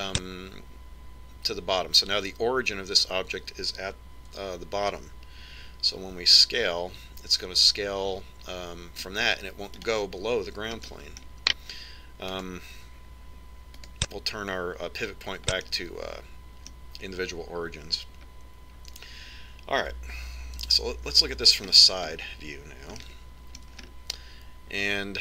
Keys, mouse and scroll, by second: 5.9 Tab, 7.6 s, 12.5-14.1 middle drag, 13.9 click, 17.3-19.1 middle drag, 22.3 KP_3, 22.9-25.2 middle drag.